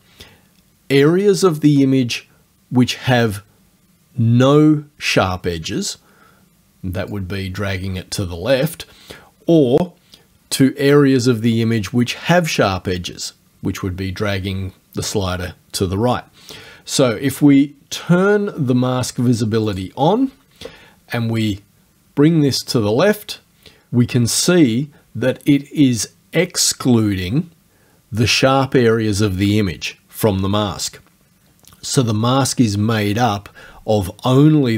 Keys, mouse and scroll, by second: 7.1-17.6 drag, 19.7 click, 21.4-23.8 drag.